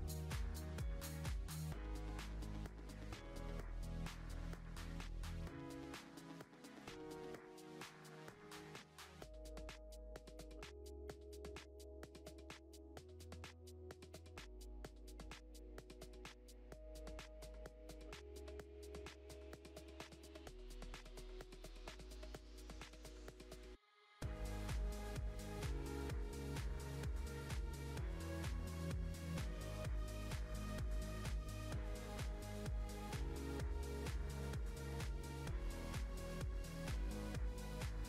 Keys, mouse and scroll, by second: 1.6-2.1 scroll up 2, 2.1-3.3 middle drag, 3.3 e, 7.0 middle click, 7.7 scroll down 1, 8.8 ctrl+r, 11.5 middle click, 13.1 1, 13.5 click, 15.3 s, 18.1 click, 19.0 click, 19.1 click, 21.7-23.3 middle drag, 23.3 click, 24.4-24.9 scroll down 1, 24.9 Tab, 25.2-25.9 scroll down 1, 25.9 click, 26.4-27.6 middle drag, 27.6 click, 28.6-30.1 shift+middle drag, 30.1 shift+d, 32.5-33.5 shift+middle drag, 33.5 s, 35.9-37.8 shift+middle drag, 37.8-38.0 scroll up 5.